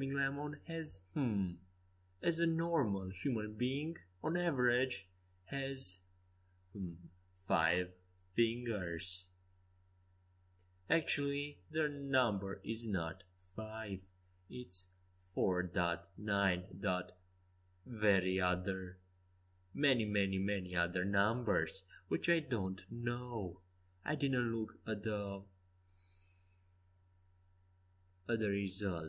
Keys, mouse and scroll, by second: 2.5-6.4 middle drag, 9.6 s, 16.6 middle click, 17.3 ctrl+z, 20.6-22.9 typing, 24.1 z, 24.2 c.